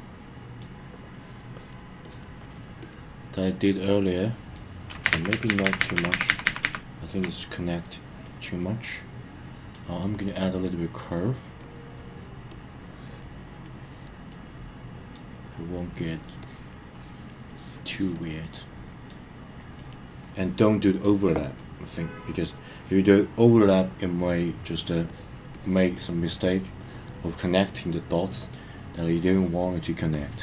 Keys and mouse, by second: 1.0 click, 1.5 click, 2.0 click, 2.4 click, 2.8 click, 3.3-4.5 middle drag, 5.1 super+z, 6.6 super+z, 8.2-9.7 middle drag, 10.4 middle click, 11.6 click, 12.5 click, 13.6 click, 14.3 middle click, 15.9 click, 16.4 click, 16.9 click, 17.5 click, 17.9 click, 18.4 middle click, 19.8-21.0 middle drag, 21.6-23.1 middle drag, 24.2 click, 24.6 click, 25.1 click, 25.5 click, 25.9 click, 26.3 click, 26.8 click, 27.4-28.5 middle drag, 29.2 click, 29.6 click, 30.1 click.